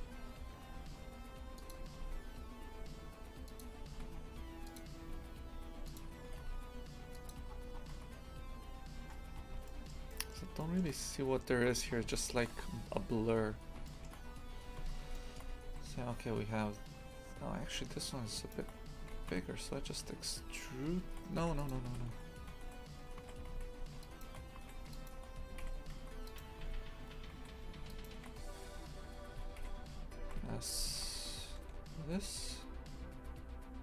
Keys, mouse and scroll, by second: 2.0 s, 6.3 g, 7.5-8.0 scroll down 11, 8.0 Tab, 9.1-9.5 scroll up 6, 9.7-11.6 shift+middle drag, 11.6-12.3 scroll down 10, 12.3 shift+middle click, 12.6-13.9 scroll up 8, 13.9 shift+middle click, 14.2 scroll up 3, 14.8 Tab, 15.2-18.0 shift+middle drag, 18.0 3, 18.4 alt+shift+right click, 19.0 s, 21.7 click, 21.9 ctrl+z, 22.1 ctrl+z, 23.5 a, 24.0 alt+shift+right click, 26.3 right click, 26.6 Tab, 27.1 a, 27.4 3, 27.9 alt+shift+right click, 29.4 s, 30.3 s.